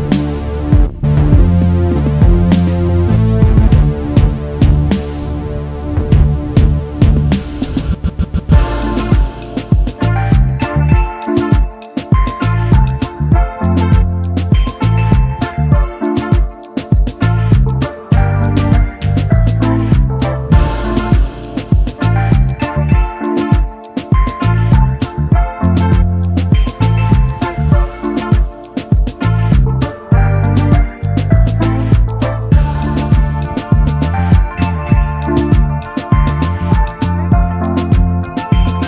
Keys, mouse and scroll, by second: 2.4 alt+scroll up 1, 3.5-3.9 alt+scroll up 1, 4.1 shift+click, 6.3 alt+click, 8.3 double click, 11.7 alt+scroll down 1, 12.4 double click, 13.3 alt+click, 18.2 alt+scroll up 1, 18.9 alt+click, 20.0 shift+click, 21.6-21.9 alt+scroll down 1, 22.2 double click, 22.7-23.1 alt+scroll down 1, 23.4 space, 23.5 double click, 25.4 alt+scroll up 1, 27.3-27.7 alt+scroll up 1, 28.1 space, 28.8 shift+click, 33.5 ctrl+g, 33.9-34.4 alt+scroll down 2, 37.7-38.4 alt+scroll down 1, 38.5-38.8 alt+scroll up 1.